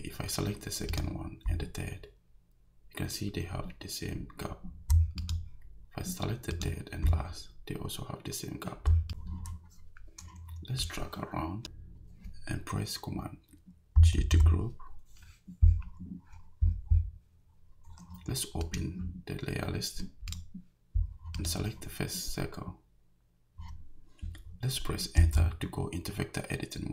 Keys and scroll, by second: 14.2 super+g, 25.2 Return.